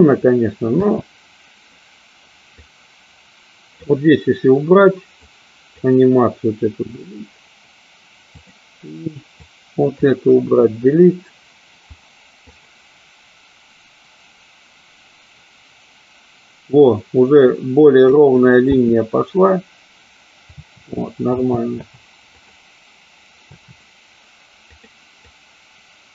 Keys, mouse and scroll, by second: 0.9 space, 2.7-4.0 drag, 5.2-5.7 drag, 6.8 Delete, 8.4 click, 9.4-9.9 drag, 10.3 Delete, 12.4-18.3 drag, 18.8 space, 20.5 space, 21.1 space, 21.4 space, 21.9 space, 22.4 click, 23.5 space, 24.7 click, 25.3-26.1 drag.